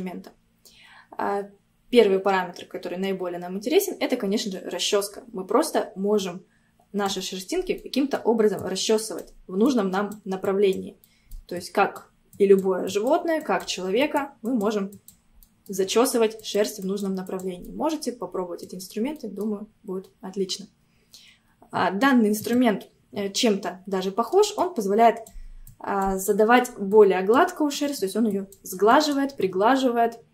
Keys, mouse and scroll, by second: 6.3-7.4 drag, 7.4 scroll down 2, 7.8 middle click, 8.6-11.1 drag, 11.1 middle click, 11.7-15.4 drag, 15.4 middle click, 16.0-17.7 drag, 17.7 middle click, 18.3-18.7 scroll up 1, 18.7 click, 19.2 middle click, 19.7-22.4 scroll up 1, 22.4-24.1 drag, 24.1 middle click, 24.6-26.3 drag, 26.3 middle click, 27.0-29.4 drag, 29.4-30.3 middle drag.